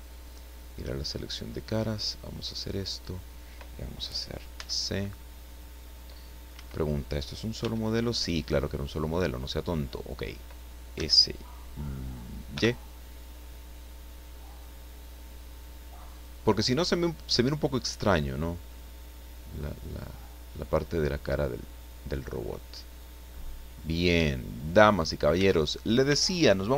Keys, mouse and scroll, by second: 0.2 click, 1.8 click, 2.6-3.6 middle drag, 4.5 c, 5.0-6.7 drag, 6.5 Escape, 7.6 l, 8.4 scroll down 2, 8.7-10.0 middle drag, 10.1 scroll up 2, 10.9 s, 12.5 y, 16.1 click, 17.2-18.3 drag, 18.7-23.6 middle drag, 23.6-24.0 scroll up 2, 24.2 shift+middle click, 24.9 shift+scroll up 2, 25.4 Tab, 26.0 Tab, 26.6 scroll up 1.